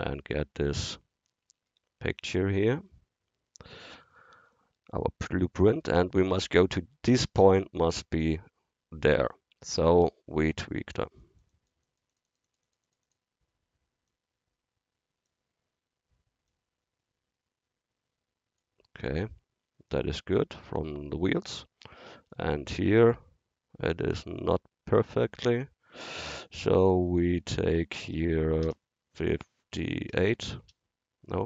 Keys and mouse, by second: 0.0-1.8 drag, 1.8 middle drag, 1.9 click, 2.6 middle click, 2.9-3.9 middle drag, 11.0-14.4 drag, 14.4 click, 14.6-16.4 drag, 16.5-21.7 drag, 24.6-26.5 middle drag, 26.5-29.2 drag.